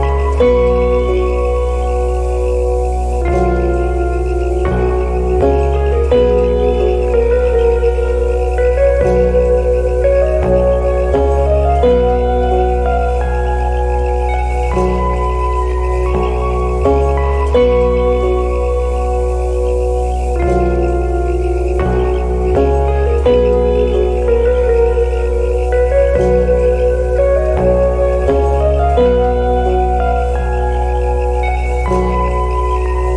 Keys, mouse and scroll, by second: 1.6 alt+click, 2.1 Tab, 2.8 Tab, 3.3 alt+click, 3.9 Tab, 4.7 alt+middle click, 5.2 Tab, 5.8 middle click, 5.9 Tab, 6.7 alt+middle click, 6.8 alt+click, 8.0 Tab, 8.5 Tab, 8.5 middle click, 8.6 Tab, 9.3 alt+middle click, 9.6 Tab, 9.7 middle click, 10.0 Tab, 10.1 middle click, 10.1 Tab, 10.7 alt+middle click, 11.1 Tab, 11.4 Tab, 11.5 middle click, 11.5 Tab, 11.8 Tab, 11.8 middle click, 11.9 Tab, 12.3 alt+middle click, 12.4 alt+click, 12.9 Tab, 13.1 Tab, 13.1 middle click, 13.2 Tab, 14.5 ctrl+z, 15.7 Tab, 16.6 alt+click, 17.3 Tab, 17.7 middle click, 17.8 Tab, 18.1 alt+middle click, 18.2 alt+click, 18.4 scroll up 1, 18.6 middle click, 18.7 Tab, 19.5 Tab, 19.5 middle click, 19.6 Tab, 20.2 Tab, 20.3 middle click, 20.3 Tab, 20.9 Tab, 20.9 middle click, 21.0 Tab, 21.3 Tab, 21.3 middle click, 21.4 Tab, 21.9 alt+click, 22.1 alt+middle click, 22.1 click, 22.5 middle click, 23.0 Tab, 23.1 middle click, 23.1 Tab, 23.6 Tab, 23.6 middle click, 23.7 Tab, 24.3 Tab, 24.3 middle click, 24.4 Tab, 25.3 scroll down 1, 25.5 alt+click, 25.6 alt+middle click, 26.4 Tab, 26.7 Tab, 26.7 middle click, 26.8 Tab, 27.1 alt+click, 28.1 alt+click, 28.5 middle click, 28.6 Tab, 28.9 Tab, 28.9 middle click, 29.2 alt+middle click, 29.6 Tab, 30.2 middle click, 30.3 Tab, 30.5 Tab, 30.6 middle click, 30.8 Tab, 30.9 middle click, 31.2 alt+middle click, 31.3 alt+click, 32.0 Tab, 32.4 Tab, 32.4 middle click, 32.5 Tab, 32.6 Tab, 32.6 middle click, 32.9 Tab, 32.9 middle click.